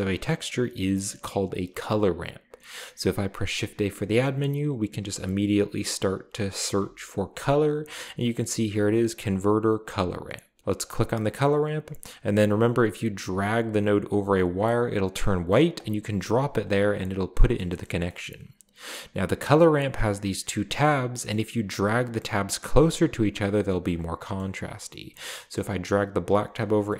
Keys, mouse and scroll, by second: 3.3 shift+a, 4.9-6.7 typing, 10.8 click, 11.5 click, 15.7 click, 16.6 click, 17.7-18.1 middle drag, 17.7-18.8 scroll up 1, 18.2 middle click, 20.4-21.9 drag, 22.4-23.9 drag, 24.2-24.8 middle drag, 24.4 scroll up 2, 25.0 scroll up 1, 25.6-26.0 middle drag, 26.2-26.6 drag.